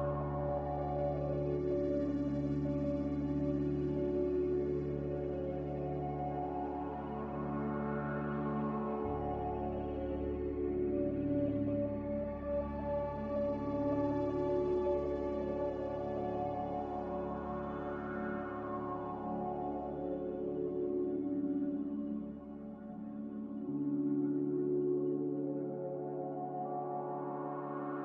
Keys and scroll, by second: 4.0 a, 5.2 ctrl+c, 8.3 ctrl+r, 21.2 n, 23.9 b, 24.8 Delete, 27.0 n.